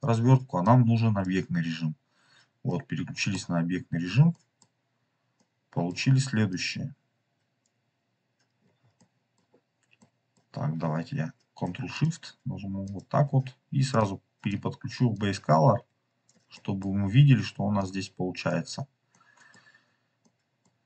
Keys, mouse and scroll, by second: 0.6 drag, 2.0-2.6 scroll down 1, 2.6-3.3 middle drag, 3.7-4.1 scroll down 4, 4.2 middle click, 5.3-6.4 middle drag, 6.4-7.7 drag, 8.0-8.3 scroll up 4, 8.5-8.9 scroll down 3, 8.9 middle click, 9.9 middle click, 11.9 ctrl+shift+click, 12.8 ctrl+shift+click, 13.8 drag, 15.1-16.2 drag, 16.4 middle click, 17.7-18.4 drag, 19.0 middle click, 19.9 scroll up 2, 20.1-20.6 middle drag, 20.2 scroll down 1.